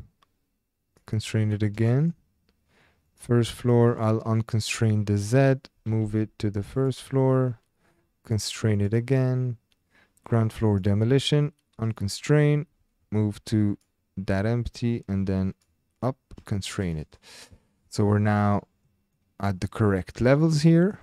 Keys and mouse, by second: 0.9 click, 1.8-2.2 shift+drag, 3.1 click, 4.4 click, 5.7 g, 5.9 z, 6.8 click, 8.7 click, 11.9 click, 12.7 g, 12.8 z, 13.7 click, 15.5 click, 16.7 shift+middle click, 16.9-17.5 middle drag, 17.8 shift+middle click, 18.1-19.0 middle drag, 19.1-20.2 middle drag, 20.7 shift+drag.